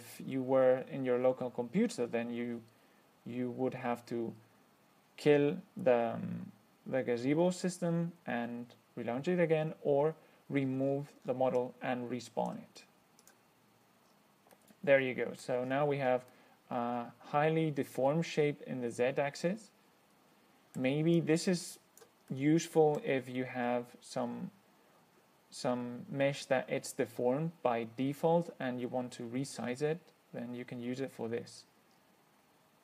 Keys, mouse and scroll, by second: 11.1-11.7 scroll down 3, 11.8-12.9 drag, 13.5 click, 14.3-14.6 scroll up 1, 14.8-15.9 middle drag, 15.9-16.2 scroll down 2, 16.6-21.2 middle drag, 21.4-22.5 drag, 22.6-23.4 middle drag, 31.9-32.6 scroll up 2.